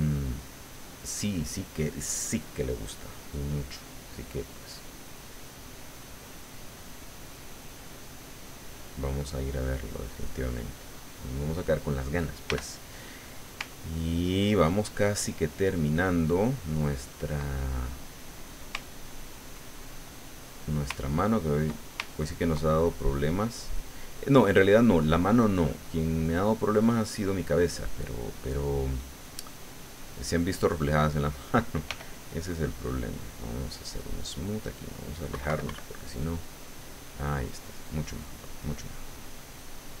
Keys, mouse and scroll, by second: 3.3-5.4 middle drag, 8.4-11.7 drag, 12.5 f, 12.9 click, 13.7-17.3 ctrl+drag, 17.5 ctrl+click, 18.0 ctrl+click, 18.8 ctrl+click, 19.9 ctrl+click, 21.0 ctrl+click, 22.1 ctrl+click, 22.8 ctrl+click, 23.4 ctrl+click, 24.1 click, 24.8 click, 25.6 middle click, 26.7 middle click, 28.2 middle click, 28.9 click, 29.8 click, 30.6 click, 31.9 f, 32.1 click, 32.6-33.9 drag, 34.1 click, 35.3 KP_Subtract, 36.2-38.4 drag, 38.5 click, 39.4-40.0 drag.